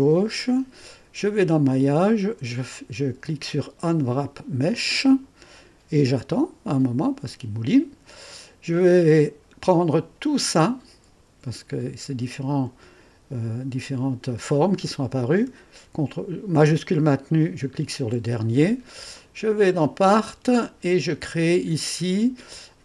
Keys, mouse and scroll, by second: 1.3 click, 3.8 click, 9.2 scroll down 2, 10.5 click, 17.4 click, 19.1 click, 19.8 click.